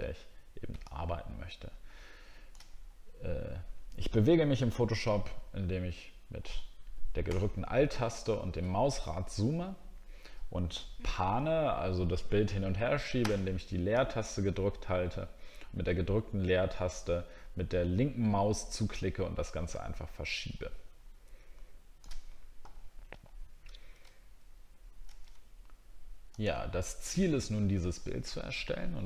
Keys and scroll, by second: 7.5 alt+scroll down 1, 7.9 alt+scroll up 1, 24.1 alt+scroll down 1, 24.8 alt+scroll up 1.